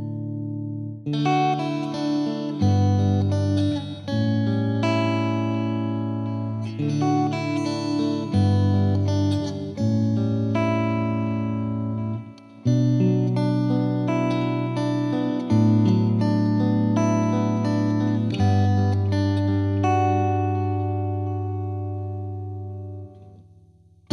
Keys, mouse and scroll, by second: 4.2-9.7 drag, 9.7 middle click, 10.3 click, 11.1 KP_7, 11.5-11.8 middle drag, 11.8-13.3 drag, 13.3-14.3 middle drag, 14.3 s, 15.5-15.9 middle drag, 15.9-16.2 scroll up 1, 16.2 Tab, 17.5 Tab, 17.6-18.1 middle drag, 18.1 KP_7, 18.4 scroll down 1, 18.6 middle drag, 18.8 scroll up 2, 19.0-19.4 drag, 19.4-20.0 middle drag, 20.0-22.3 drag, 22.3 scroll down 1, 22.4 middle click, 22.9-23.6 drag, 23.6 middle click, 23.9 z.